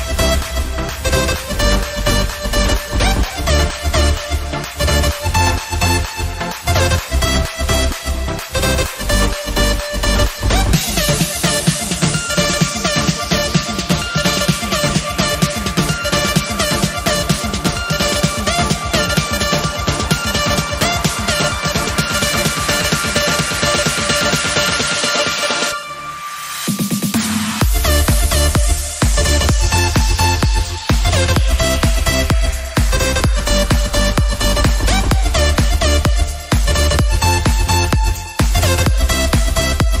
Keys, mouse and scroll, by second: 0.4 drag, 0.6-1.1 shift+middle drag, 1.1 click, 1.3-2.0 shift+middle drag, 2.0 shift+d, 3.4 shift+middle click, 3.7 scroll up 3, 4.1-5.1 scroll down 4, 5.1 KP_1, 5.5-5.9 scroll up 1, 5.9 alt+z, 6.1-7.1 shift+middle drag, 7.1-8.4 drag, 8.4 scroll up 1, 8.7 g, 11.4 r, 12.4 g, 13.5-14.1 scroll up 1, 14.4 click, 14.7 middle click, 15.2-15.6 scroll up 1, 15.6 KP_1, 16.1 shift+middle click, 16.7 g, 17.6-18.6 middle drag, 18.6 KP_1, 19.6 g, 21.0-21.8 middle drag, 21.8 click, 22.1-22.7 middle drag, 22.7 KP_1, 23.1 scroll down 1, 23.4 click, 23.9 alt+z, 24.1-25.2 shift+middle drag, 25.2 click, 25.5 shift+middle click, 26.3 shift+d, 28.9 scroll up 2, 29.1-31.3 shift+middle drag, 31.3 g, 33.5 click, 33.9 click, 34.1-35.3 middle drag, 35.3 KP_1, 35.7 scroll up 1, 36.0 shift+middle click, 36.6 click, 38.0 click, 38.6 drag, 39.1 g, 39.9-40.0 scroll down 4.